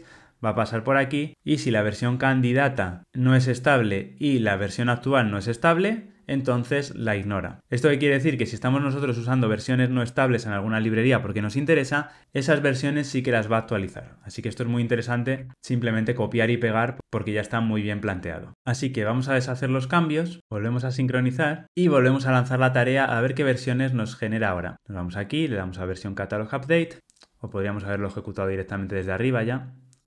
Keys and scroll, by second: 17.0 super+v.